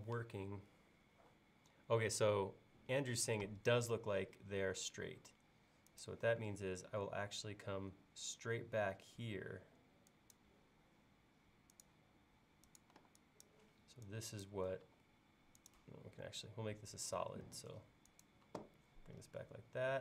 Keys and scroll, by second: 4.4 l, 13.0 e, 14.9 l, 18.5 l.